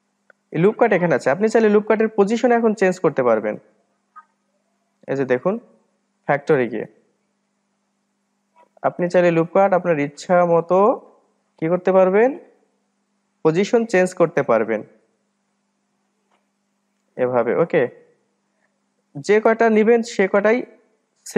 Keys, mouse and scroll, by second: 0.6-2.8 scroll up 1, 7.7-10.7 drag, 20.5-21.3 drag.